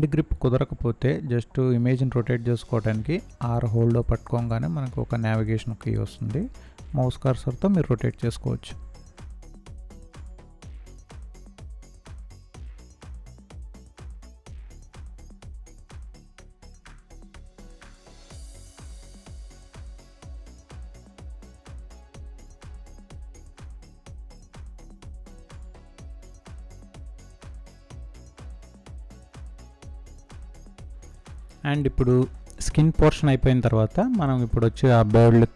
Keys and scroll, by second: 11.8 space, 13.5 space, 14.8 space, 17.3 ctrl+space, 23.2 ctrl+-, 24.1 ctrl+space, 26.6 space, 30.4 ctrl+space.